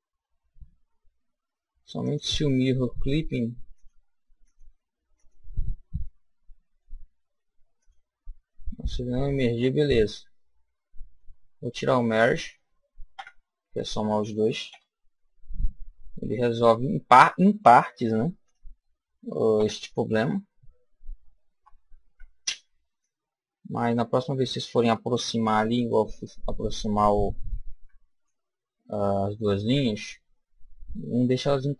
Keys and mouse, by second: 2.0-6.9 drag, 6.1 middle click, 6.6-9.0 middle drag, 7.8 click, 9.6 middle click, 10.5 middle click, 10.7 middle click, 11.5-14.7 middle drag, 13.2 KP_1, 14.7 KP_7, 19.6 KP_1, 21.6 a, 22.1 b, 25.9 click, 27.7 b.